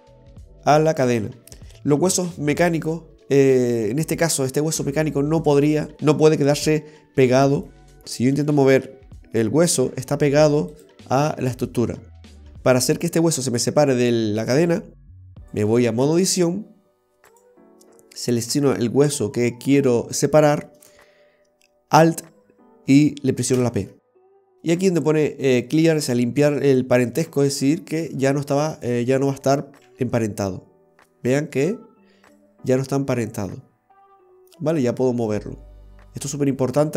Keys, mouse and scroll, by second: 7.7 right click, 8.0 click, 8.4 g, 12.4 alt+r, 15.6 click, 17.4 right click, 23.6 alt+p, 28.8 right click, 30.0 g.